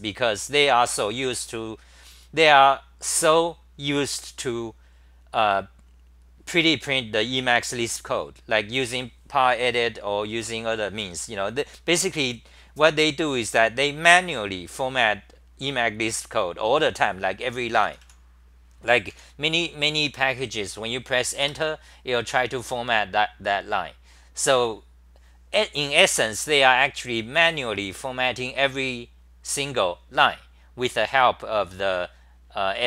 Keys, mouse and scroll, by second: 17.6-19.6 typing, 21.4 Return.